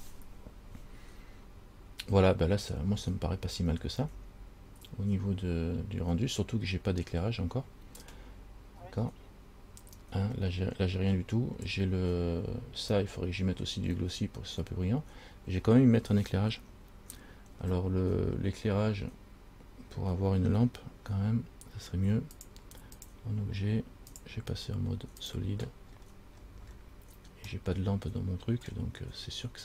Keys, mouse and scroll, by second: 3.3-3.7 scroll down 2, 15.4-15.8 scroll down 2, 22.6 click, 23.3 click, 24.3 click, 26.1-27.5 scroll down 13, 27.7 middle click, 29.2-29.6 scroll up 6.